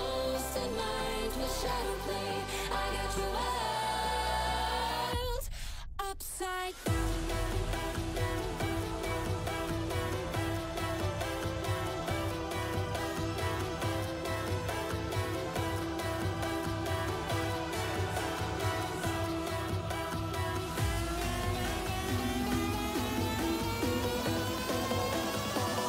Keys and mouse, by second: 0.2 click, 0.5-1.2 drag, 2.5 click, 3.9 click, 4.4-5.0 drag, 5.2 click, 7.2 click, 8.1 click, 9.7-10.8 drag, 11.4 drag, 13.0-13.6 drag, 13.9-14.8 drag, 17.3 ctrl+s, 19.4-22.1 shift+drag, 22.5 ctrl+s, 22.9 click, 24.1 click, 25.2 click.